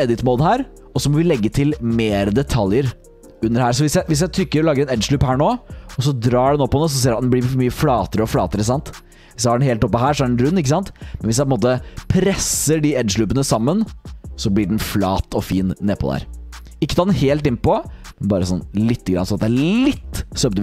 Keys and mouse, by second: 1.4 click.